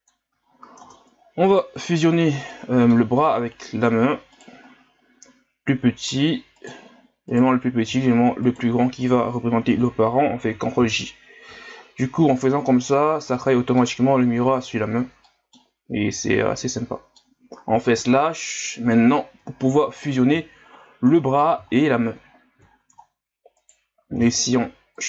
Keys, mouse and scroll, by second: 0.4-0.8 ctrl+scroll down 4, 0.8 Tab, 1.5 right click, 2.0-2.5 scroll down 3, 2.5-3.5 middle drag, 3.5 scroll up 2, 4.3 right click, 6.5 right click, 7.3 right click, 8.5 shift+right click, 10.9 ctrl+j, 11.7-13.3 scroll down 12, 13.3-15.8 middle drag, 15.8-16.2 scroll up 2, 16.2-17.9 middle drag, 17.9 KP_Divide, 18.9-19.5 middle drag, 19.5-20.2 ctrl+scroll up 12, 21.2-21.7 middle drag, 22.2-23.0 scroll up 11, 23.0-23.6 ctrl+scroll down 6, 23.6 right click, 24.1 w.